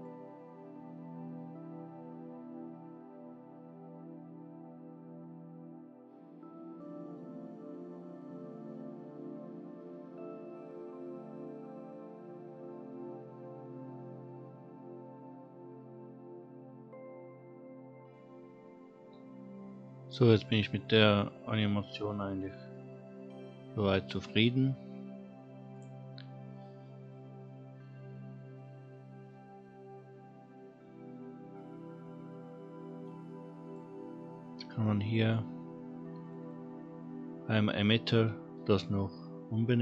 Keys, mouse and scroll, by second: 20.0-20.5 scroll down 2, 20.6-21.2 middle drag, 21.4 scroll up 1, 21.6-21.9 middle drag, 22.1-22.4 scroll down 1, 22.4 middle drag, 25.7 click, 26.9-27.4 scroll down 1, 27.4 scroll down 1, 33.6 click, 35.0 click, 36.2 click, 36.4-39.8 drag.